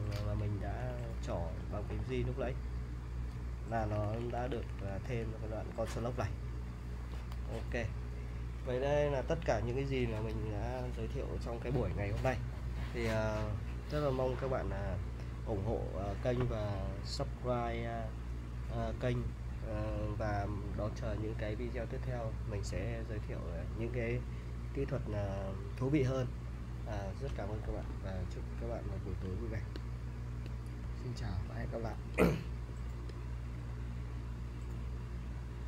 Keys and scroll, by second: 0.0-7.0 typing.